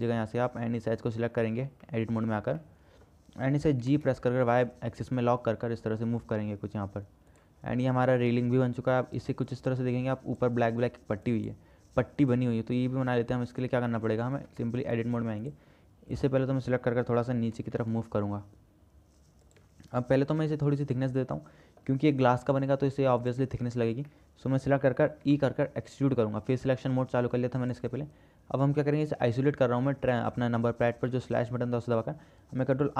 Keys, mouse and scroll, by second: 2.1 middle click, 2.8 middle click, 4.0 g, 8.1 Tab, 8.6 KP_0, 13.3 click, 14.1-14.6 middle drag, 14.7 Tab, 15.1 click, 16.4 click, 17.8 g, 20.7-22.1 drag, 23.1 3, 23.4 click, 24.3 middle click, 25.4 e, 29.4 KP_Divide, 30.3 middle click, 31.3 middle click.